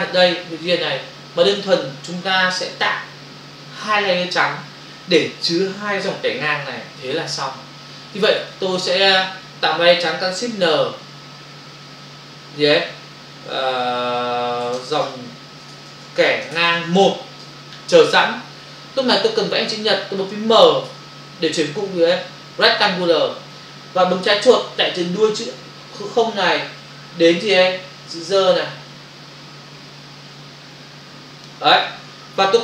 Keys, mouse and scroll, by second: 9.2 click, 16.4-16.8 typing, 26.2 click.